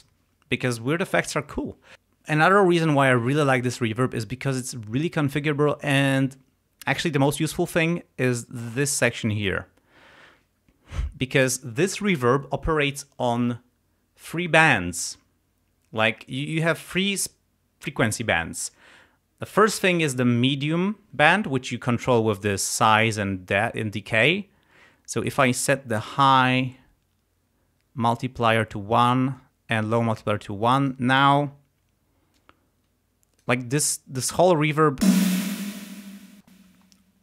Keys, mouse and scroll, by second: 25.3-28.7 drag, 29.4-31.1 drag, 32.4-33.6 drag, 35.1 space, 36.7 space.